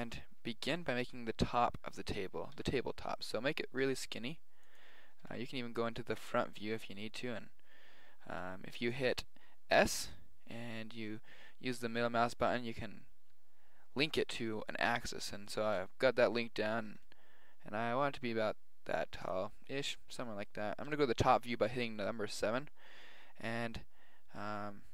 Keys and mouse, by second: 2.5 s, 5.9-10.0 middle drag, 8.2 s, 9.7 s, 16.9 s, 19.6 middle click, 20.4 middle click.